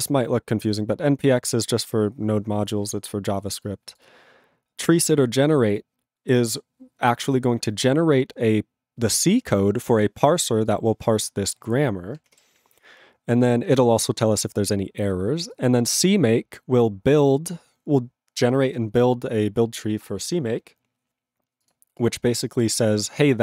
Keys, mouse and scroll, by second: 10.7 click, 10.8 click, 11.2-11.6 scroll down 1, 11.6-12.5 scroll up 1.